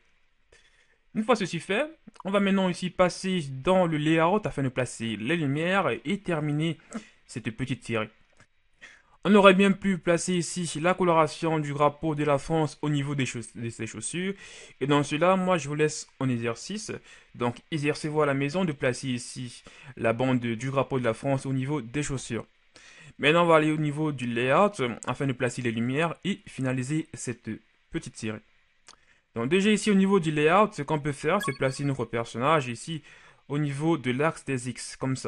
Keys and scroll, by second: 31.6 shift+b.